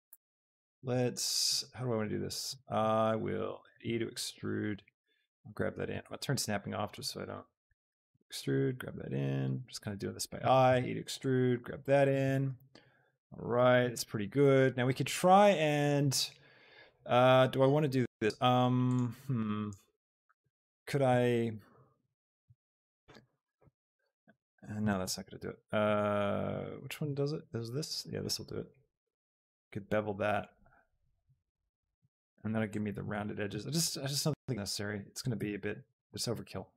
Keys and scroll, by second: 3.6 Escape, 6.1 shift+Tab, 7.6 e, 8.0 Escape, 10.5 Escape, 22.4 ctrl+b, 25.3 ctrl+z, 34.6 z, 35.3 Tab.